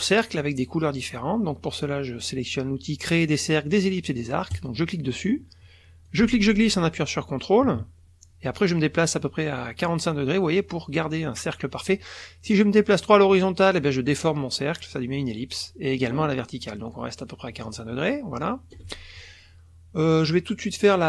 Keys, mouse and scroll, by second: 4.5 click, 6.1-18.9 ctrl+drag.